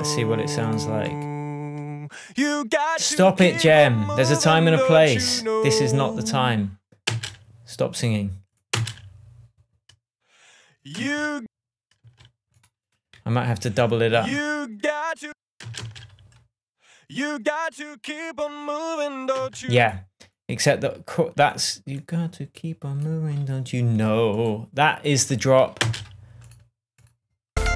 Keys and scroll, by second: 7.5 space, 9.1 space, 11.3 space, 16.0 space, 19.7 space, 26.2 space.